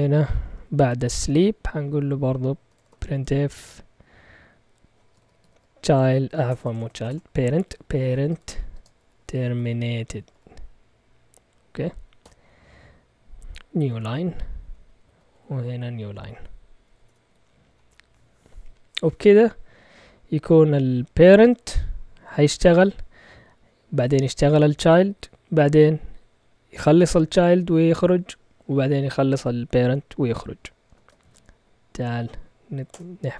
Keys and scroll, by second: 0.4 Up, 1.1 Return, 2.4-3.7 typing, 4.8-10.8 typing, 12.2 typing, 13.6-17.7 typing, 21.2 Up, 21.4-22.2 typing, 22.0 Up, 22.8 Down, 23.5 Down, 23.5 Down, 23.8 Down, 24.1 Down, 25.1 Down, 30.8 Escape, 31.2 shift+;, 32.1 x, 32.9 Return.